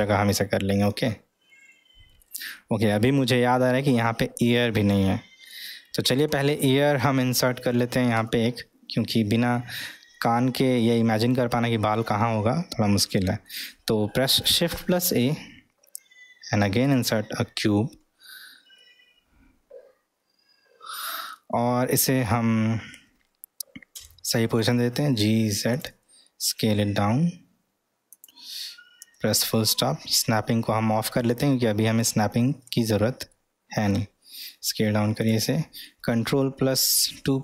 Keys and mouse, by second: 1.1-2.2 middle drag, 3.0-5.6 middle drag, 5.6-6.2 middle drag, 8.2 Tab, 10.2-10.7 middle drag, 13.0-13.6 middle drag, 18.8-21.1 middle drag, 23.9 g, 26.3 s, 32.0 click, 33.3 middle click, 34.4 s.